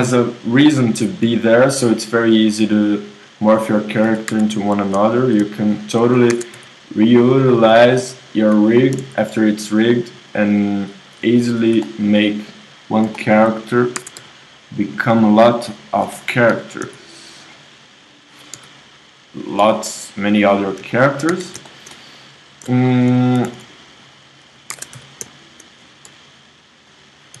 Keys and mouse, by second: 1.3 g, 4.1 z, 4.3 KP_1, 6.3 ctrl+Tab, 9.0 s, 12.8-14.0 drag, 14.0 ctrl+Tab, 15.0-16.5 drag, 16.5 g, 18.1-19.6 drag, 18.5 KP_3, 19.6 g, 21.3 KP_1, 23.1 click, 23.4-24.5 right drag, 23.4 s, 24.7 ctrl+Tab, 24.7 right click, 25.1-26.1 drag, 26.1-27.4 right drag, 26.1 i.